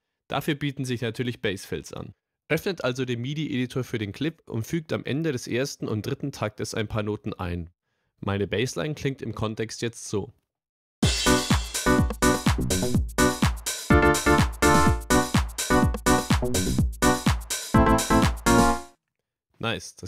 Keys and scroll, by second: 11.0 space, 19.3 space.